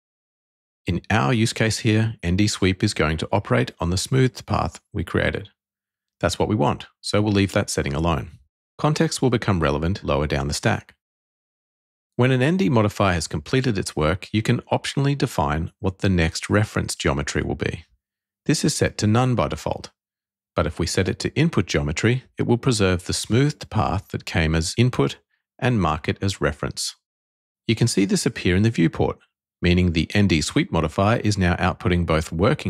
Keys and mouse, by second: 16.4-21.6 drag.